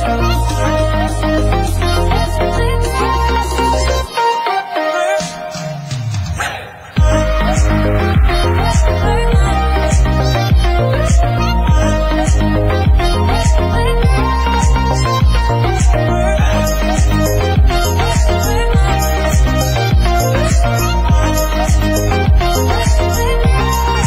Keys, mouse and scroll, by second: 1.1-1.9 scroll up 10, 1.9-2.4 scroll down 2, 2.6 scroll down 6, 2.8-3.2 scroll up 1, 3.2 click, 4.6 scroll up 8, 5.0 click, 5.1 scroll down 10, 6.1 click, 7.3 scroll down 2, 7.7 alt+a, 8.1 scroll up 14, 8.9 click, 9.3 click, 10.0 alt+a, 10.2 shift+middle drag, 10.5 ctrl+s, 10.9-11.8 shift+middle drag, 11.8 click, 12.0-12.4 scroll down 2, 12.4 KP_7, 13.3-14.7 scroll up 5, 13.6 shift+middle click, 13.9 Tab, 14.7-15.1 scroll up 8, 14.8 shift+middle click, 15.4 alt+click, 15.5 scroll down 5, 15.7 shift+middle click, 15.9 g, 16.8 ctrl+r, 17.6 alt+a, 17.9 alt+click, 18.2 g, 19.1-19.9 scroll up 4, 19.3 shift+middle click, 19.9 alt+click, 20.1 g, 20.9 alt+click, 21.1 g, 22.3 alt+a, 22.4-23.3 scroll down 14, 22.8 shift+middle click, 23.3 KP_1, 23.7 shift+middle click.